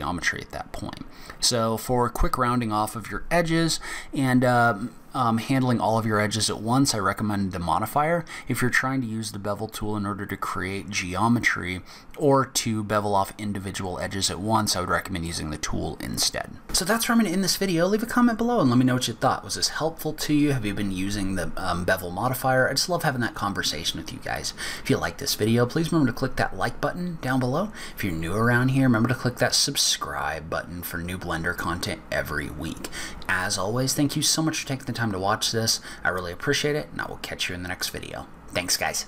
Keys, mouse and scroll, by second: 0.0 scroll down 1, 0.3 scroll up 1, 0.6-1.2 scroll down 2, 1.8 scroll up 1, 8.1 scroll down 1.